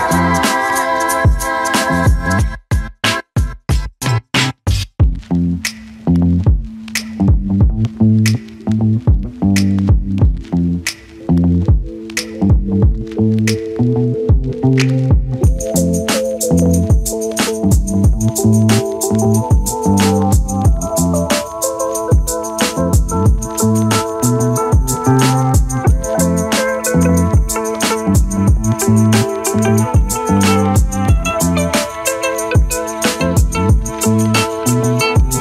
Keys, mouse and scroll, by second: 0.3 z, 0.7 shift+click, 1.5 shift+click, 2.0 shift+click, 2.4 shift+click, 3.3 shift+click, 4.2 shift+click, 4.5 alt+click, 5.2 z, 5.5 alt+click, 5.9 3, 6.1 right click, 7.3 click, 7.6 click, 7.9 Tab, 8.3 click, 8.5 click, 9.5 click, 9.8 alt+click, 10.7 click, 11.1 ctrl+a, 11.5-11.9 drag, 12.3 Tab, 13.8 z, 14.1 click, 15.2 click, 15.8 ctrl+z, 16.1 click, 16.5 click, 18.2 click, 18.7 click, 20.0 click, 20.4 alt+click, 20.5 z, 20.7 alt+right drag, 20.9-21.7 alt+drag, 21.9 click, 21.9-22.7 drag, 22.8 alt+right click, 22.9 alt+click, 23.6 alt+right drag, 23.7-24.5 alt+drag, 25.0 alt+right drag, 25.1 alt+click, 25.7 alt+right click, 25.9 alt+click, 26.5 alt+drag, 26.6 alt+middle click, 27.4 click, 27.8 click, 28.0 click, 28.3 click, 30.2 click, 30.9 click, 31.3 Delete, 31.7 click, 32.3 click, 33.3 click, 34.2 click.